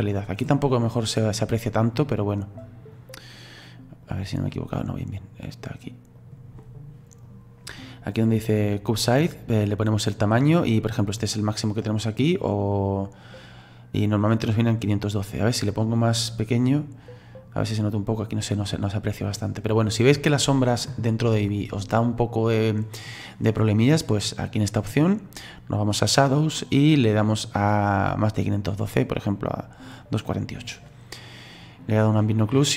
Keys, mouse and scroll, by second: 16.8-22.6 drag, 29.7-32.0 drag.